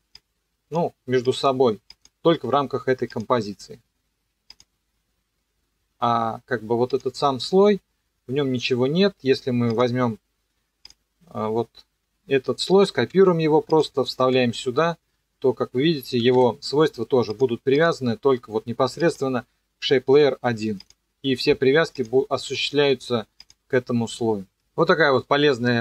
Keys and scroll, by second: 13.1 ctrl+c, 14.2 ctrl+v, 16.2 e.